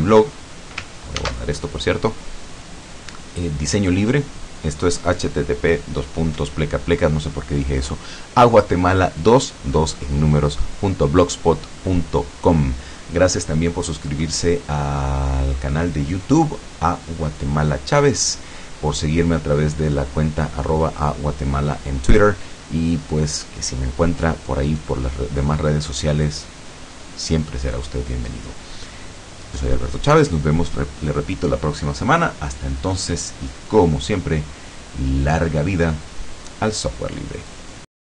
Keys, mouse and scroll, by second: 1.2 ctrl+s.